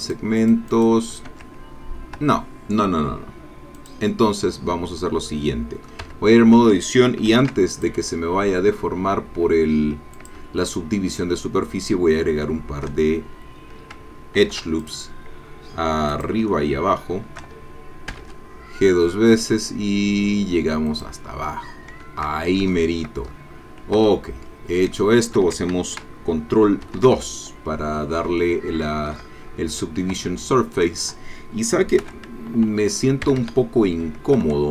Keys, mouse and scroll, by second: 0.0 click, 0.4 click, 1.3 Tab, 2.2 Tab, 3.7 click, 5.3 middle click, 6.1 Tab, 7.3 ctrl+r, 7.7 ctrl+click, 10.2 shift+click, 10.6-13.0 shift+middle drag, 13.0-13.8 shift+scroll down 1, 14.4 ctrl+r, 14.8 ctrl+click, 16.1 click, 16.5-17.5 shift+middle drag, 18.1 g, 20.9 click, 22.3 shift+scroll down 2, 22.7 shift+middle click, 23.3-23.8 shift+scroll up 3, 23.8 scroll down 2, 24.0 Tab, 24.6-24.9 scroll down 2, 25.0 shift+middle click, 26.9 ctrl+2, 28.4 shift+right click, 30.2 Tab, 32.0 1, 33.3 a.